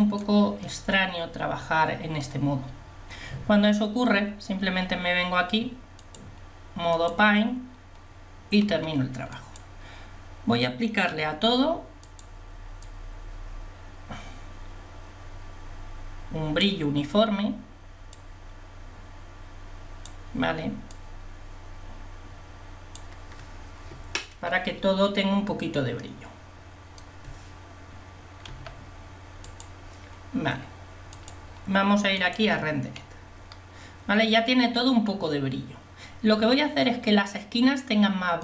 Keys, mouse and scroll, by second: 9.4 f, 12.2 f, 12.9 click, 18.4 click, 26.1 middle click, 28.5 f.